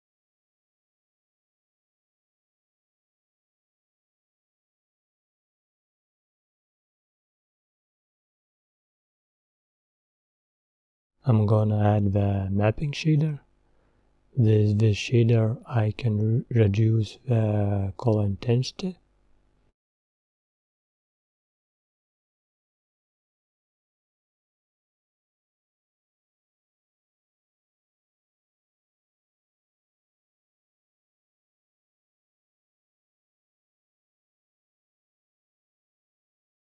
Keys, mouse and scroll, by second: 4.7 click, 5.1-5.5 scroll up 3, 6.9 click, 9.3 click, 11.6 shift+click, 14.7 click, 23.9 scroll up 11, 25.6 click, 28.3-33.3 drag.